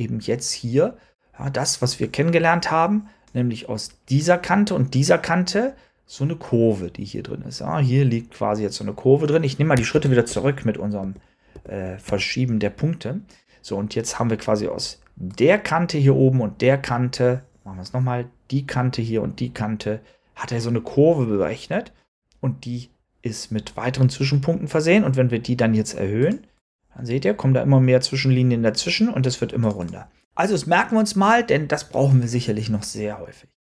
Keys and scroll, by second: 9.8 super+z, 10.9 super+z, 11.4 super+z.